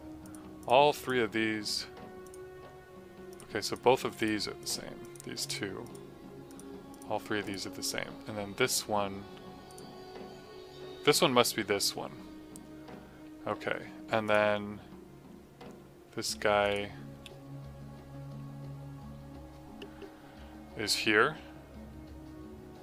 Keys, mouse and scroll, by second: 16.0 click.